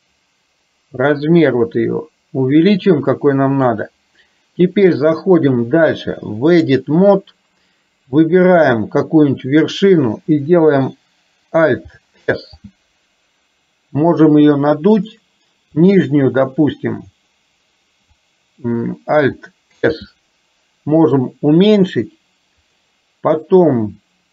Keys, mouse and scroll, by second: 5.5-7.0 drag, 8.7 click, 12.3 alt+s, 20.0 alt+s, 23.8-24.3 middle drag.